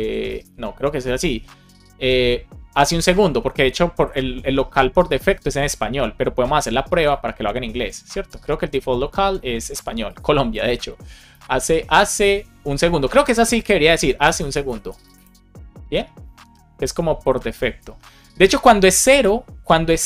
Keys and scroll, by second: 0.3 BackSpace, 3.3 shift+h, 11.2 Left, 12.0 space, 12.6 space, 14.2 BackSpace.